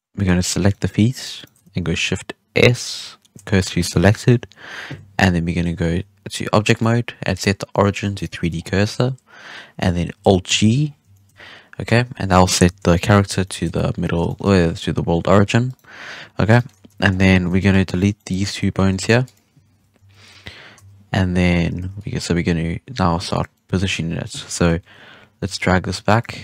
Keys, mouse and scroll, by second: 0.4 shift+right drag, 0.6 shift+right drag, 1.1 shift+right click, 1.3 shift+right click, 1.8 shift+s, 4.1 KP_1, 5.8 Tab, 6.7-8.5 drag, 8.5-8.8 scroll down 4, 8.8-10.0 scroll up 4, 10.4 alt+g, 10.7-11.1 scroll down 6, 11.1 shift+middle drag, 11.3-11.8 scroll up 1, 11.8 z, 12.6 KP_3, 13.4-14.6 shift+middle drag, 14.6-15.4 scroll up 2, 15.6 right click, 16.5-16.8 shift+middle drag, 16.8 Tab, 17.0-17.4 scroll up 6, 17.4 alt+a, 17.6-18.1 drag, 18.1-18.8 middle drag, 18.8 x, 19.9-22.3 typing, 21.0-21.3 scroll down 3, 21.4-21.7 scroll up 3, 21.7 alt+a, 21.9 click, 23.5-24.6 middle drag, 24.6 KP_3, 25.3 g, 26.3 z.